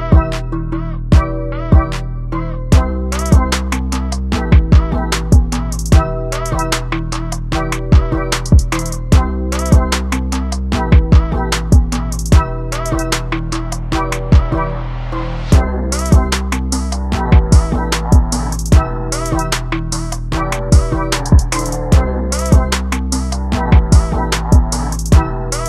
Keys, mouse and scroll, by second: 8.8 z, 9.1 click, 9.3 click, 9.4 click, 9.7 Tab, 10.0 alt+z, 10.1-10.5 scroll up 1, 10.5 click, 10.7 middle click, 10.9 alt+z, 11.0 scroll up 3, 11.1 shift+middle click, 11.2 alt+z, 11.4 middle click, 11.5 alt+a, 11.6 middle click, 12.2 click, 12.2 alt+z, 12.4 middle click, 12.5 alt+z, 12.6 scroll up 1, 12.7 shift+middle click, 13.1 KP_1, 13.3 scroll up 1, 13.5 s, 14.4 scroll down 1, 14.5 shift+middle click, 14.8 ctrl+KP_Add, 14.9 ctrl+KP_Add, 15.2 ctrl+KP_Add, 15.6 s, 16.9 ctrl+z, 18.2 click, 18.4 scroll down 2, 18.6 a, 18.7-19.1 scroll up 2, 19.1 s, 19.9 KP_3, 20.3 s, 21.3 scroll down 2, 21.4-21.7 scroll up 1, 21.7 Tab, 22.0 alt+a, 22.1 alt+z, 22.2 middle click, 22.5 KP_0, 22.9 z, 23.5 z, 23.7-24.2 scroll down 1.